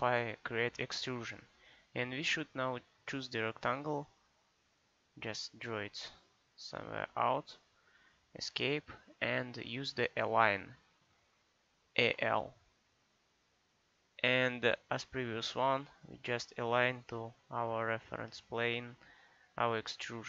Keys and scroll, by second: 8.0 Escape, 12.0 a, 12.1 l.